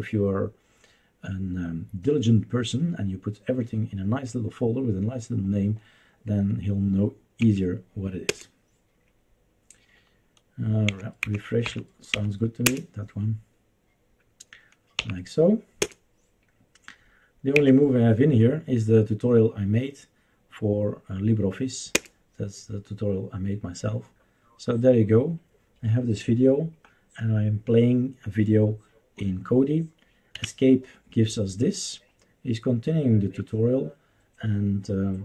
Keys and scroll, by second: 7.4 Right, 8.2 Return, 10.9 Down, 11.2 Down, 11.6 Up, 12.1 Left, 12.6 Return, 15.0 Up, 15.8 Return, 17.6 Down, 21.9 Return, 30.3 Escape.